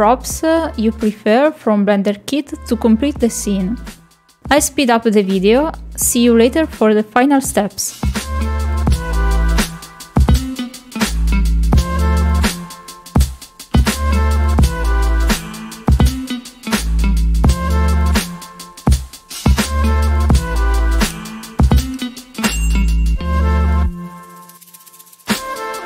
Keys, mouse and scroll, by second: 0.0 click, 1.9 click, 3.2 click, 3.5 click, 4.5 middle click, 5.1 shift+middle click, 5.4 middle click, 5.6 shift+middle click, 5.8 shift+middle click, 7.6 click, 7.9 r, 11.3 click, 11.8 click, 12.3 KP_Decimal, 13.2 r, 14.7 click, 15.2 click, 15.4 click, 16.6 shift+middle click, 16.8 KP_0.